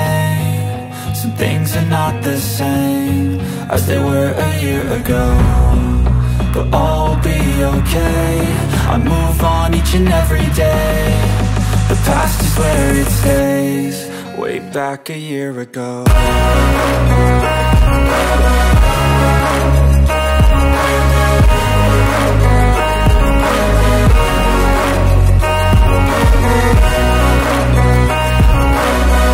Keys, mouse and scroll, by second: 1.1 space, 1.2-2.3 drag, 2.3 right click, 2.7 click, 5.1-12.9 drag, 16.8 alt+scroll up 1, 17.7 space, 18.1 space, 20.5 right click, 22.1 click, 23.1 space.